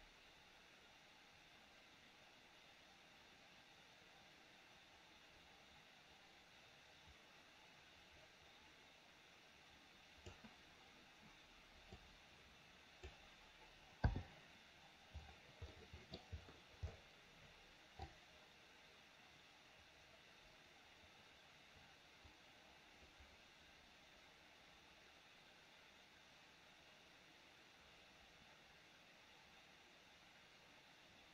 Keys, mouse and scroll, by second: 12.2-13.2 drag, 15.9 middle click, 18.2-31.3 drag.